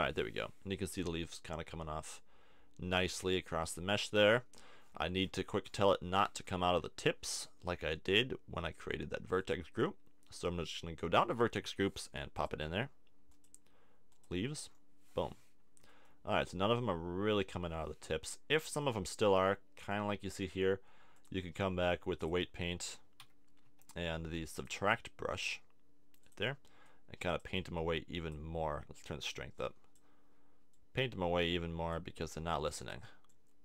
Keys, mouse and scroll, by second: 2.1 middle click, 2.5-3.7 middle drag, 6.2-9.4 middle drag, 9.4-11.1 drag, 14.7-15.9 drag, 15.9-18.3 middle drag, 18.5 middle click, 19.5 middle click, 23.2 t, 23.7 t, 33.3-33.6 middle drag.